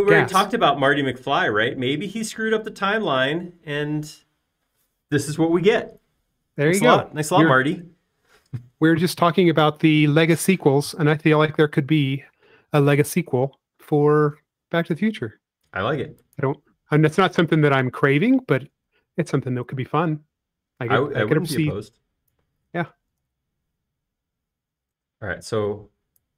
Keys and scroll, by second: 16.7 c, 19.8 p, 24.7 super+z, 26.1 typing.